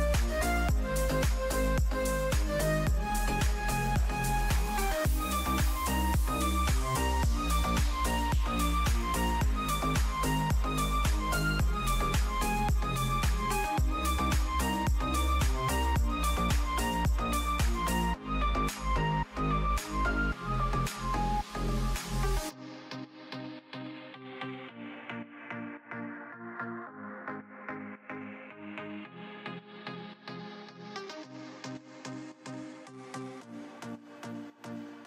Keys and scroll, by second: 8.8 ctrl+shift+[, 9.0 ctrl+], 17.5 ctrl+z, 20.4 ctrl+z, 21.0 space, 23.9 space, 25.0 space, 26.5 ctrl+z.